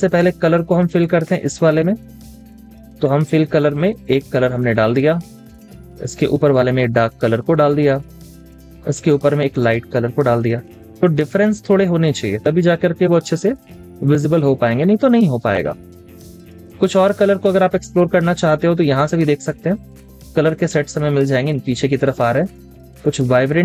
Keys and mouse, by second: 5.6 double click, 10.8 double click, 11.1 space, 11.3 double click.